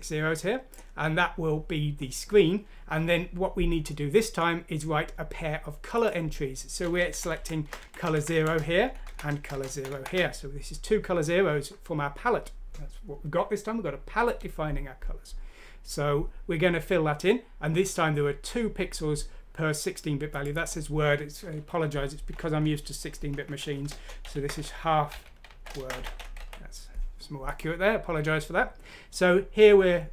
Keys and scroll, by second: 7.1 Left, 7.4 Left, 7.8 Left, 8.1 Left, 8.3 Left, 8.8 Right, 9.1 Right, 9.5 Left, 9.7 Right, 9.9 Right, 10.9 typing, 24.0-26.8 typing.